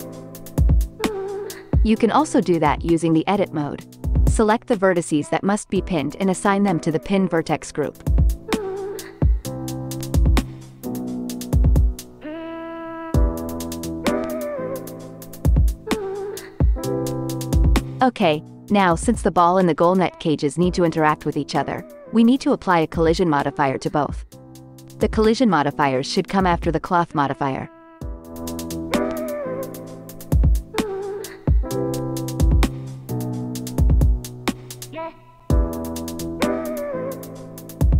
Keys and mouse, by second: 0.0-0.8 typing, 13.7-17.7 drag, 22.3-26.7 drag, 27.0 click, 29.5-32.9 drag.